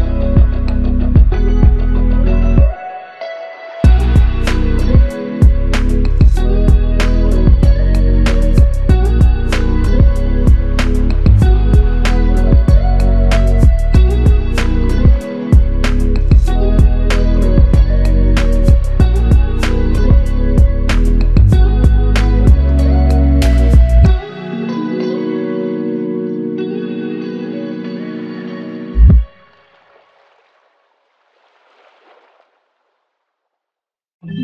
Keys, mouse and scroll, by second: 0.7 typing, 5.1 ctrl+click, 6.9 alt+click, 14.9 shift+click, 21.8 f, 23.7 shift+click, 25.7 shift+click, 27.7 alt+shift+click.